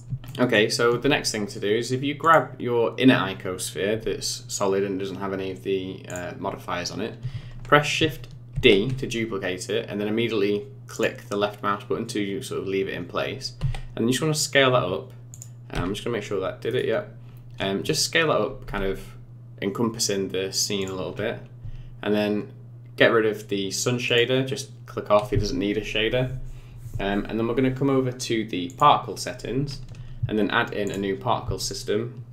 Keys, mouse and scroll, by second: 0.2 shift+middle click, 1.2 middle click, 2.2 click, 6.0 click, 8.5 shift+d, 13.6 s, 15.8 g, 18.6 s, 21.0 scroll down 4, 24.0 click, 28.6 click, 30.8 click.